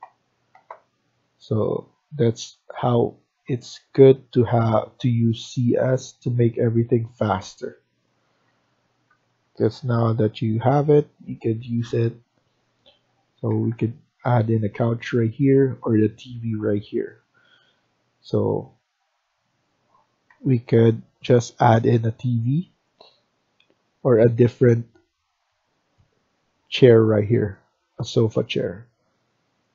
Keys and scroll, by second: 6.4 Escape, 6.8 Escape, 6.9 Escape, 7.2 Escape, 9.0 Right, 9.2 Right, 9.4 Right, 9.8 Right, 9.9 Right, 10.6 Right, 13.4 Escape, 13.6 Escape, 17.1 Escape, 17.3 Escape, 20.2 Delete, 23.4 Delete.